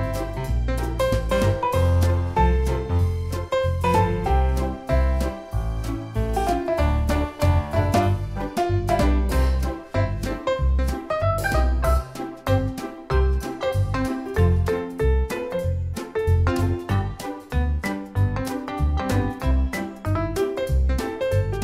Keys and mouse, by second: 1.1 click, 2.4 click, 4.6 click, 6.7 click, 16.5 click.